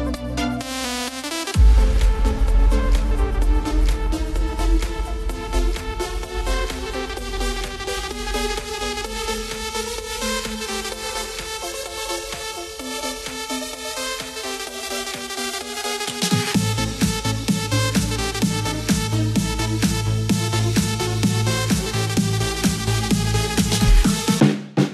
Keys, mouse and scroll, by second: 1.2 s, 2.8-4.4 scroll down 2, 4.4 KP_7, 7.1 KP_1, 11.9 z, 13.0 click, 17.8 ctrl+KP_Add, 19.2 ctrl+KP_Add, 19.7 ctrl+KP_Add, 20.0 ctrl+KP_Add, 23.5 r.